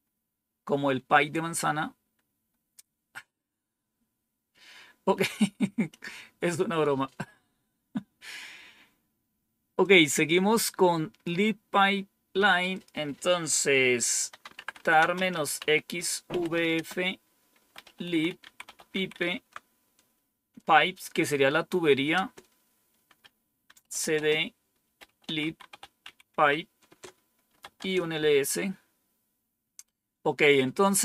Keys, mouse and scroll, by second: 9.7-11.2 drag, 12.6 click, 14.0-19.3 typing, 22.0 Return, 23.5-27.9 typing, 26.8 Return.